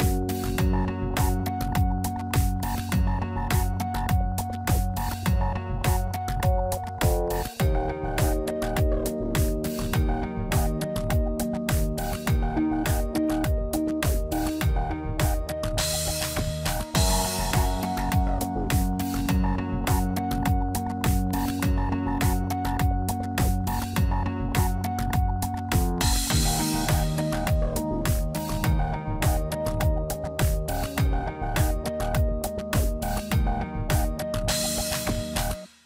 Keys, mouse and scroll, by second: 0.2 a, 1.5 click, 6.2 Tab, 6.4 click, 6.6 Tab, 7.4 a, 8.2 click, 9.9 Tab, 10.0 click, 10.1 Tab, 10.3 scroll down 3, 10.8 a, 11.4 click, 13.5 middle click, 13.7 scroll down 3, 13.8 shift+middle click, 14.2 middle click, 14.3 Tab, 14.4 click, 14.5 Tab, 14.9 a, 17.4 click, 19.5 middle click, 19.9 Tab, 20.0 click, 20.2 Tab, 20.6 a, 21.3 click, 22.9 middle click, 23.3 Tab, 23.7 middle click, 24.3 shift+middle click, 25.5 click, 27.6 shift+middle click, 28.1 middle click, 28.4-29.2 scroll up 4, 28.7 middle click, 29.4 middle click, 29.7 scroll up 1, 30.5 scroll down 1, 30.8 middle click, 31.6 click, 35.4 middle click.